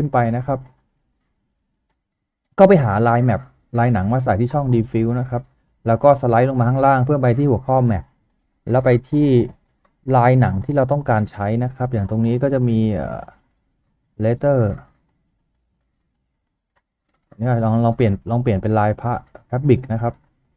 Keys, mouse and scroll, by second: 16.1-16.9 typing, 18.8 typing, 20.0 double click.